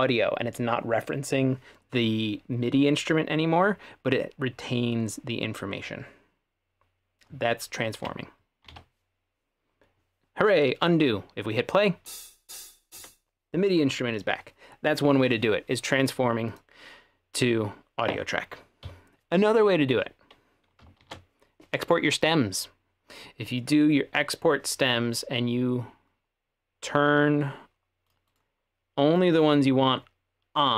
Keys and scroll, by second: 8.7 super+z, 12.1 space, 13.0 space, 18.9 Escape, 21.0 shift+super+e.